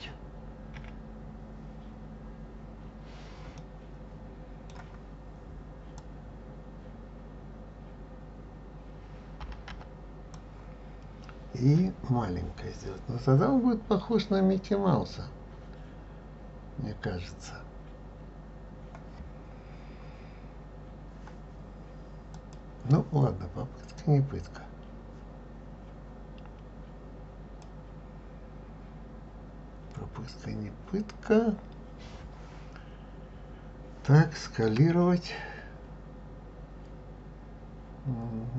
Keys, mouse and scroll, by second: 0.8 KP_1, 3.6-6.0 middle drag, 6.0-9.0 drag, 22.4 click, 23.9 click, 34.8 s.